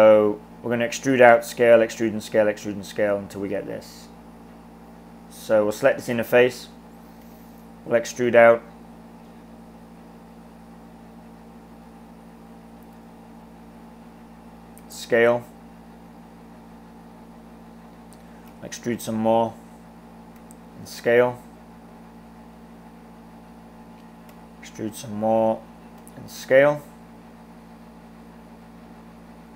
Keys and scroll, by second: 7.2 e, 14.9 s, 18.5 e, 20.5 s, 24.4 e, 26.1 s.